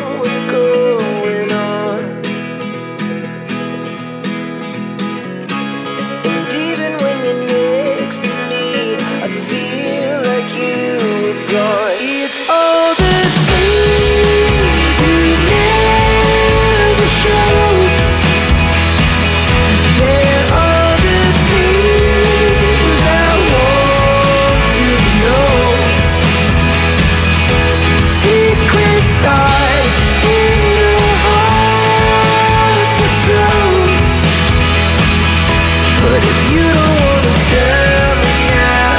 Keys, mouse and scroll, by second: 6.3 click, 7.8 click, 9.3 click, 17.1 click, 18.4 click, 19.5 ctrl+n, 22.6 click, 25.6 click, 29.5 click, 32.7 click, 34.5 click, 34.7 double click, 35.9 click.